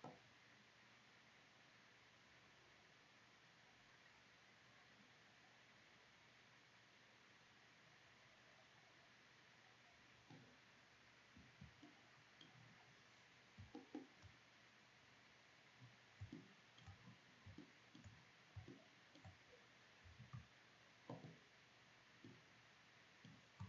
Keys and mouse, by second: 11.5 middle click, 13.4-15.4 middle drag, 17.3 click, 17.8 click, 18.4 click, 19.8 Delete.